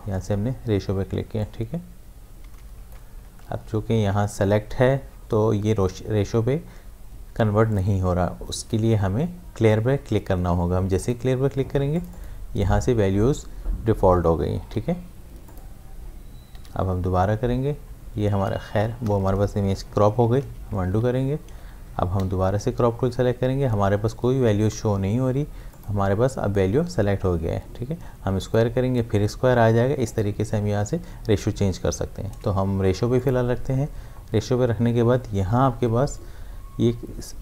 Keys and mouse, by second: 3.5 ctrl+z, 11.0 click, 14.6 v, 15.4 click, 16.5 c, 20.2 c, 20.4 ctrl+z, 20.9 v, 22.2 c, 25.7 click, 28.4 click, 33.2 click.